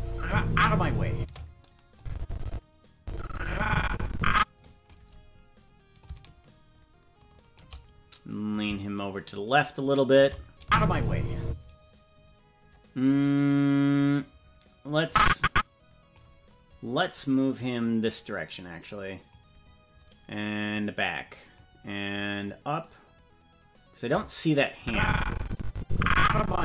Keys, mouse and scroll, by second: 1.1 space, 1.9-4.9 drag, 5.9-7.6 shift+drag, 8.5-10.2 drag, 10.6 space, 11.4 space, 15.0-16.1 drag, 17.5-19.3 drag, 20.7 click, 22.4-24.1 drag, 24.7-26.6 drag.